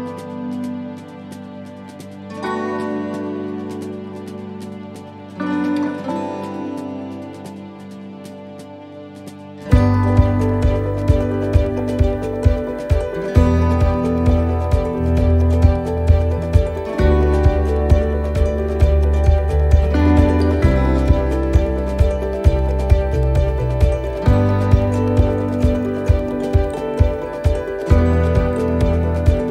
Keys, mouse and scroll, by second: 0.4-1.7 scroll down 9, 1.7-2.8 scroll down 10, 2.8-5.8 scroll down 6, 5.8-6.3 scroll down 3, 6.4-10.5 scroll up 31, 10.5 click, 13.0 click, 13.7 click, 17.7 click, 22.7 click, 28.5-29.1 scroll down 1, 29.1-29.5 scroll down 2.